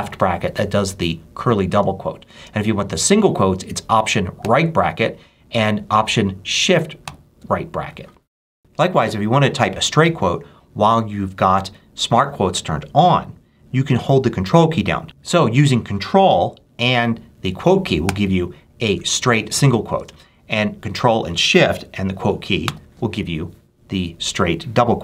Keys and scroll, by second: 2.2 space, 4.3 alt+], 6.9 alt+shift+], 17.9 ctrl+', 19.8 space, 20.8 ctrl+space, 22.5 ctrl+shift+'.